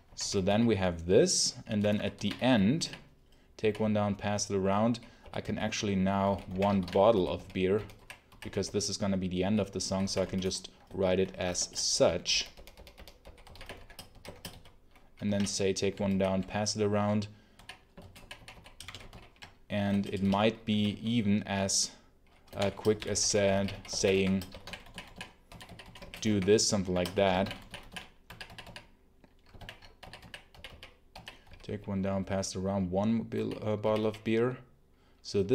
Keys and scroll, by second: 0.0-10.1 typing, 11.5 ctrl+shift+Return, 11.8 Escape, 11.9-14.9 typing, 15.2 ctrl+d, 19.0 ctrl+super+l, 19.8 Return, 20.0 space, 20.2 p, 20.6 z, 22.2-28.7 typing, 29.5 ctrl+alt+l, 29.9 k, 30.4 d, 31.0 k, 31.4 z, 33.2 j, 33.7 d, 35.3 Home, 35.4 k.